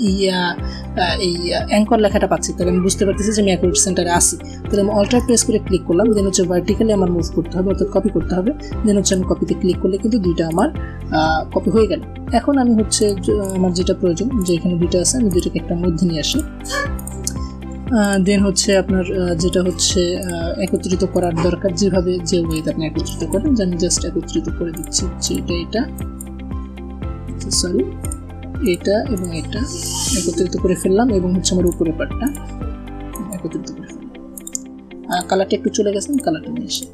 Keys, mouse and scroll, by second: 2.7 alt+Num_Lock, 4.8 alt+click, 8.7 alt+Num_Lock, 8.7 alt+click, 9.8 alt+v, 10.0 alt+click, 11.5 alt+a, 12.1 alt+scroll up 1, 12.6 click, 14.0 click, 16.8-17.3 scroll down 1, 17.6 shift+click, 18.2-19.3 drag, 20.8 shift+click, 24.4 ctrl+click, 25.5 click, 26.9 ctrl+z, 27.5 ctrl+click, 29.4 click, 30.0-30.6 scroll up 1, 31.3 ctrl+click, 33.3 a, 33.9 click, 35.6 click, 35.8 click, 36.1 a, 36.4 click.